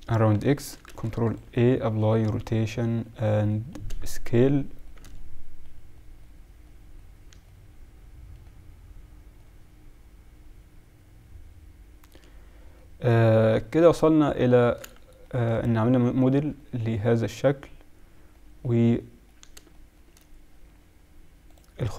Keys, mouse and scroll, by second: 0.5-1.7 middle drag, 1.0 ctrl+a, 9.5-10.2 middle drag, 10.4-11.5 middle drag, 11.8 middle click, 12.8 middle click, 13.2-13.7 middle drag, 19.9 middle click.